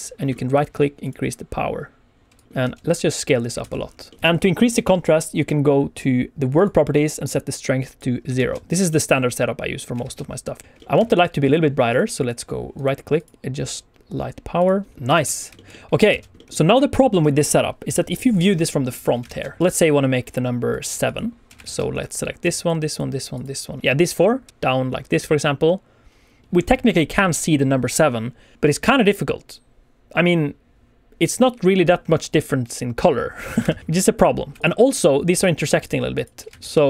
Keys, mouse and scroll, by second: 0.4 right click, 2.3 click, 2.4 alt+shift+z, 2.4 click, 2.4 middle click, 2.4 scroll down 3, 2.6 s, 3.4 click, 3.6 alt+a, 3.8 scroll up 3, 4.1 middle click, 4.5 alt+shift+z, 4.5 shift+middle click, 6.5 click, 7.5 click, 8.3 alt+shift+z, 8.9 middle click, 10.0 alt+shift+z, 10.6 click, 10.6 Escape, 10.6 right click, 10.7 middle click, 10.9 alt+a, 11.4 click, 11.9 click, 12.1 click, 12.7 right click, 14.6 click, 14.9 alt+shift+z, 14.9 middle click, 14.9 scroll down 1, 15.1 alt+shift+z, 15.3 scroll up 2, 15.5 shift+middle click, 15.7 middle click, 16.1 alt+a, 16.3 middle click, 16.5 right click, 17.8 KP_1, 18.3 middle click, 18.9 scroll down 1, 19.2 alt+shift+z, 19.5 middle click, 19.6 click, 20.7 click, 21.0 shift+click, 21.6 alt+shift+z, 22.0 click, 22.5 shift+click, 22.8 shift+click, 23.3 shift+click, 24.5 x, 33.6 Escape, 34.5 alt+shift+z, 34.5 alt+a, 34.6 click, 35.4 click, 35.6 shift+click, 35.8 shift+click, 36.1 shift+click, 36.7 alt+shift+z.